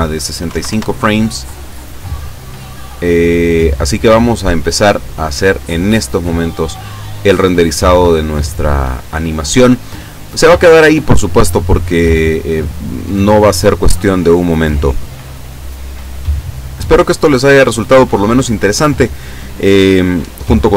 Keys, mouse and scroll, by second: 0.5 KP_6, 0.7 KP_Enter, 2.4-3.3 scroll down 2, 3.5-4.2 scroll up 3, 4.8 click.